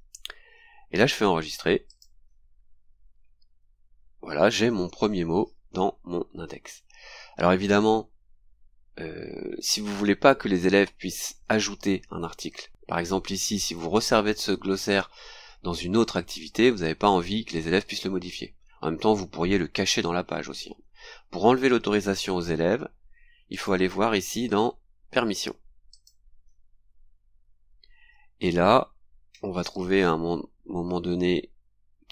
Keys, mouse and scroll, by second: 1.0-1.3 scroll down 2, 1.9 click, 4.3-4.6 scroll down 2, 22.0-22.5 scroll up 4, 23.5 click, 25.9 click, 28.3-29.1 scroll down 4, 29.5-30.5 scroll down 4, 31.2-31.5 scroll down 2.